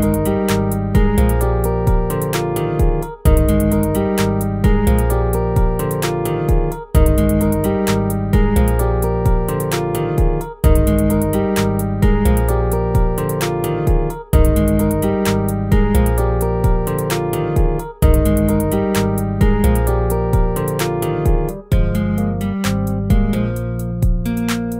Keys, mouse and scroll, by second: 1.5 ctrl+-, 6.7 ctrl+z, 13.8 ctrl++, 18.0 ctrl+-, 18.9 ctrl++.